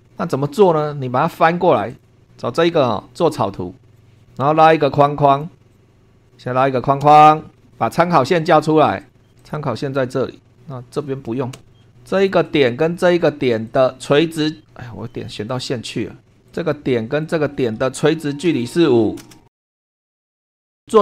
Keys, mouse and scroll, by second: 0.2 super+2, 0.2 super+scroll down 2, 0.8 middle click, 1.9 click, 3.9 click, 5.3 click, 5.7 click, 6.3 click, 7.0 Escape, 7.5 shift+middle click, 7.7 shift+scroll up 1, 9.0 click, 9.4 click, 11.5 Escape, 12.1 click, 13.7 click, 15.4 click, 16.4 click, 17.2 click, 18.4 1, 18.8 5, 19.2 Return, 19.6 shift+middle click, 19.7 click, 19.9 shift+middle click, 20.1 shift+middle click.